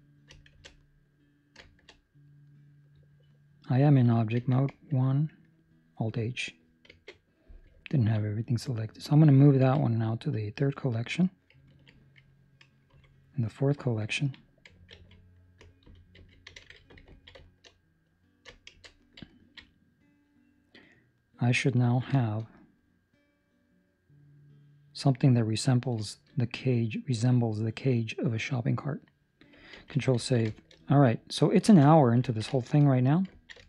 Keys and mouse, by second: 0.5 shift+1, 2.4 right click, 3.9 Escape, 3.9 right click, 4.3 1, 7.7 alt+h, 7.8 ctrl+middle click, 8.4 right click, 9.5 m, 11.6 ctrl+middle click, 12.8 4, 13.5 right click, 15.7 Escape, 16.1 a, 17.1 ctrl+middle click, 17.3 shift+middle click, 18.6 shift+1, 19.2 ctrl+middle click, 19.6 middle click, 21.7 ctrl+middle click, 22.1 shift+middle click, 22.4 middle click, 25.3 ctrl+middle click, 25.9 shift+middle click, 26.3 middle click, 29.7 ctrl+s, 30.3 ctrl+middle click, 30.6 shift+middle click, 31.6 ctrl+space, 32.3 ctrl+middle click, 32.8 middle click, 33.4 ctrl+middle click.